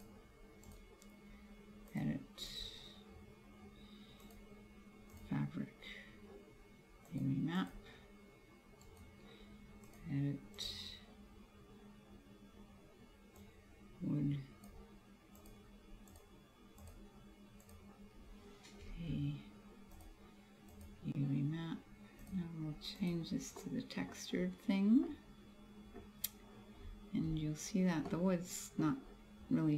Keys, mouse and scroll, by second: 0.8 right click, 4.3 click, 7.2 click, 7.7 click, 9.0 right click, 9.9 click, 13.5 click, 15.4 click, 16.9 click, 19.0 a, 20.0 click, 22.2 click, 23.7 middle click, 24.2-25.1 scroll up 2, 25.1 middle click, 26.8-27.6 scroll down 7, 28.1 middle click, 28.6 middle click.